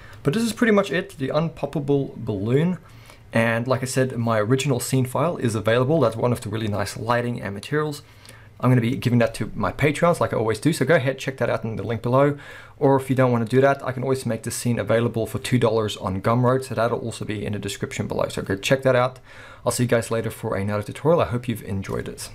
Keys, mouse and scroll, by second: 0.4-0.7 scroll up 2.